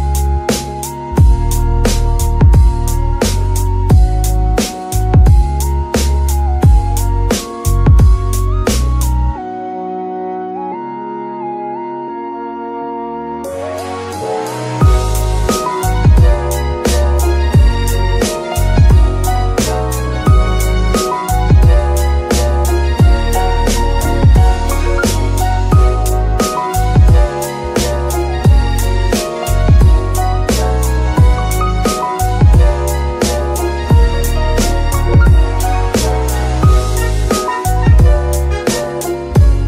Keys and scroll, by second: 10.1 d, 11.9 shift+z, 13.7 d, 16.0 z, 22.0 alt+r, 26.7 g, 26.8 y, 27.9 r, 31.8 Escape, 32.8 g, 34.0 r, 34.2 r, 35.7 Escape, 36.3 g, 37.1 r, 37.2 r, 39.0 Escape.